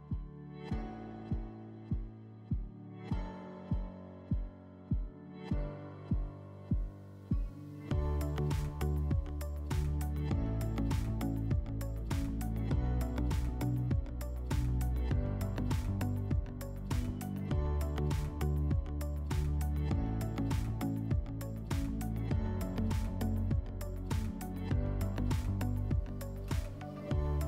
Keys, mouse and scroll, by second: 0.6 click, 3.6 click, 10.1 click, 10.2 click, 10.9 typing, 11.2 Return, 12.0 click, 12.1 click, 12.6 1, 12.9 Return, 14.4 click.